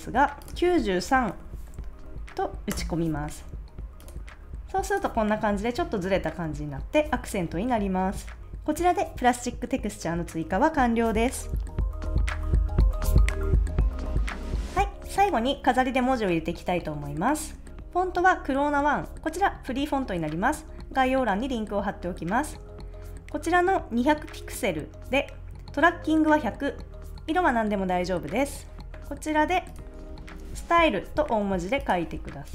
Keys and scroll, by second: 0.9-1.9 typing, 2.8 Return, 29.8-30.8 typing.